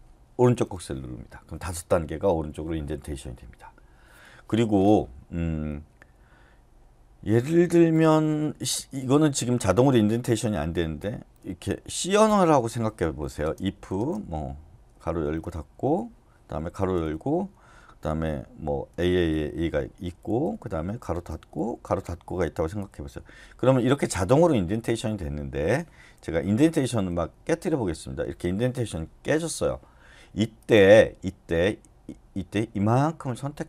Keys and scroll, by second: 0.4 shift+., 8.4-11.0 typing, 12.2 Return, 13.0-15.1 typing, 15.7 Return, 16.8 shift+[, 17.0 Return, 19.1-20.2 typing, 20.4 Return, 21.3 }, 21.5 Return, 22.8 }, 23.5 Return, 24.2 Escape, 24.4-25.3 typing, 26.6-28.2 typing.